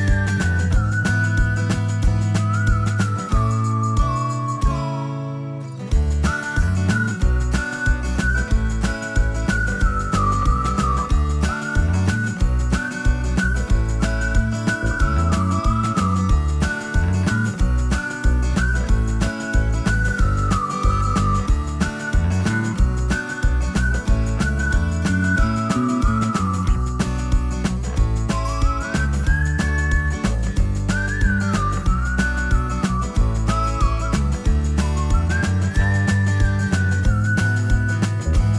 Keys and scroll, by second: 3.0 t, 16.6-18.0 typing, 18.3 Return, 22.4 space.